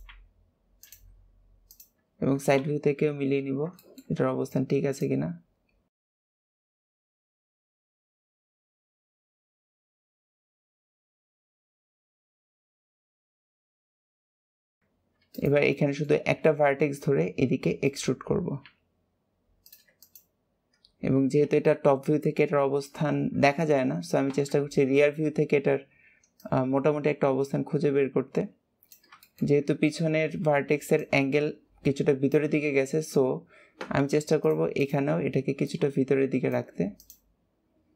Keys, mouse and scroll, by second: 0.0 g, 1.6 shift+click, 2.5 KP_3, 3.7-4.9 shift+middle drag, 4.9 click, 6.6 click, 6.9 click, 7.0 shift+click, 7.5 click, 7.8 click, 8.0 shift+middle click, 8.1 shift+click, 8.4 shift+middle click, 8.7 click, 9.9 shift+middle click, 10.2 click, 10.4 shift+click, 10.7 click, 11.4 click, 12.2 click, 12.6 click, 13.4 click, 14.4 click, 14.7 click, 15.3 click, 15.7 shift+middle click, 16.3 e, 19.9 shift+click, 21.5 KP_4, 24.3 ctrl+KP_1, 26.3 click, 29.1 shift+middle click, 29.5-32.7 scroll down 2, 32.9-34.3 scroll up 2, 34.3 click, 34.7 click, 35.6 click, 36.9 click.